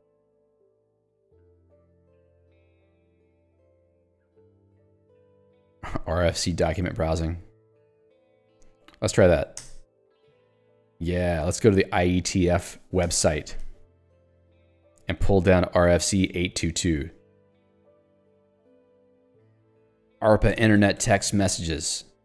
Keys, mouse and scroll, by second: 0.2 Escape, 0.8 j, 2.6 ctrl+d, 8.1 k, 8.5 l, 15.6 alt+Return, 17.3 click, 17.6 Escape, 17.9 ctrl+d, 21.5 ctrl+u.